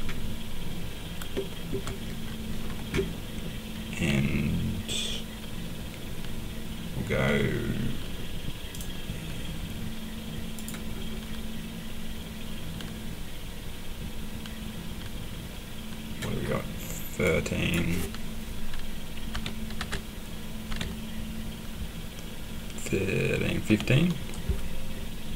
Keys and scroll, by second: 19.3-20.7 typing, 23.7 5.